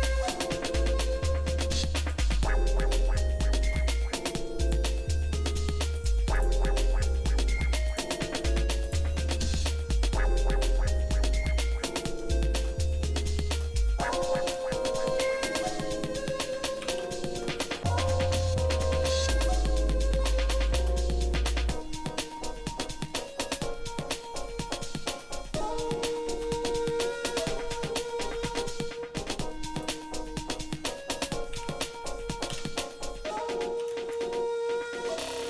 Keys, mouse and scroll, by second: 2.3 click, 3.2 shift+middle click, 4.6-10.7 drag, 11.2 shift+middle click, 12.3 shift+middle click, 12.8 middle click, 13.4 shift+middle click, 13.7-14.3 scroll down 2, 14.5-14.8 scroll up 3, 15.1 shift+middle click, 15.7 shift+middle click, 16.9 ctrl+s, 19.8 middle click, 20.5 shift+middle click, 24.2 middle click, 24.7 shift+scroll up 1, 24.7 shift+middle click, 26.1 shift+a, 30.6 shift+middle click, 31.5 r.